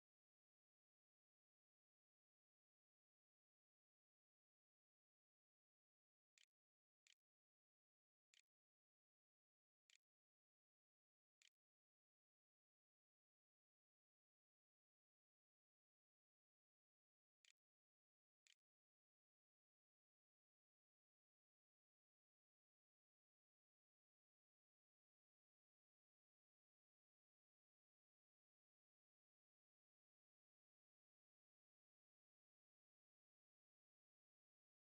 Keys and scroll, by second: 5.1-11.7 typing, 16.6-19.2 typing.